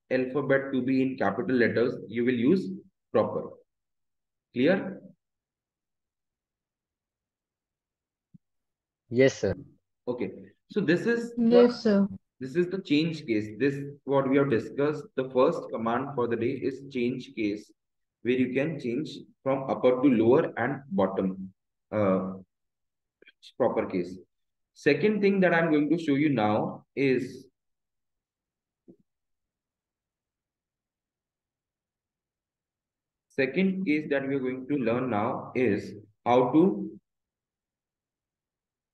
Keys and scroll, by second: 6.1 Left, 7.4 Down, 8.7 Up, 12.7 Down, 14.4 BackSpace, 14.7 shift+c, 15.4 BackSpace, 17.0 shift+c, 17.7 Return, 23.3 Down, 25.3 Up, 30.7 Down, 31.0 Return, 34.3 Down, 35.0 Return.